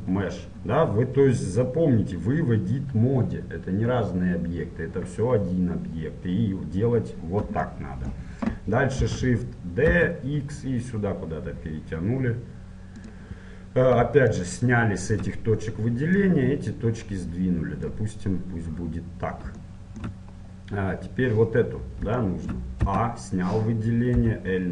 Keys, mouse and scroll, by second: 7.9-10.0 middle drag, 9.2 shift+d, 15.3-18.0 drag, 19.8-24.3 middle drag, 23.1 a, 24.3 l.